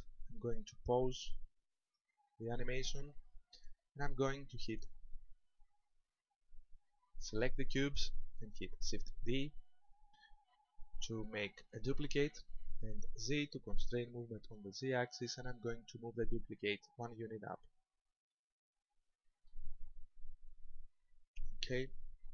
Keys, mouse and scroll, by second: 1.9 click, 3.8 shift+middle click, 5.2-5.6 scroll up 3, 7.2 right click, 9.6 shift+d, 17.5 ctrl+click, 18.3 middle click, 20.6 shift+middle click.